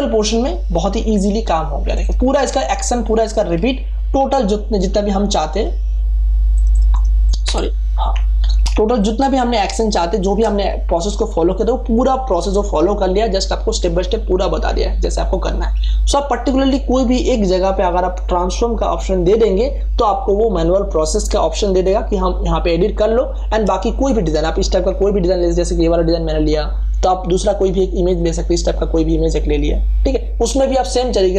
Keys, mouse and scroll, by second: 2.3 ctrl+f, 3.4 ctrl+d, 4.3 click, 7.3 d, 7.4 Escape, 8.4 ctrl+d, 8.7 ctrl+space, 8.9 click, 9.2 ctrl+space, 9.9 ctrl+space, 10.1 click, 16.9-23.9 drag, 23.8 space, 23.9 ctrl+click, 25.2 ctrl+o, 26.5-26.9 scroll down 1, 28.1 click.